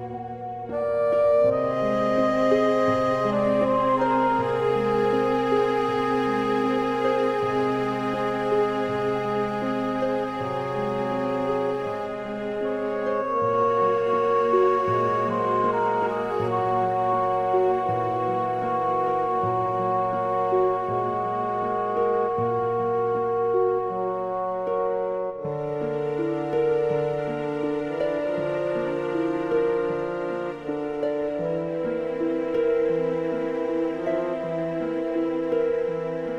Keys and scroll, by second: 0.6 Return, 18.4 super+z.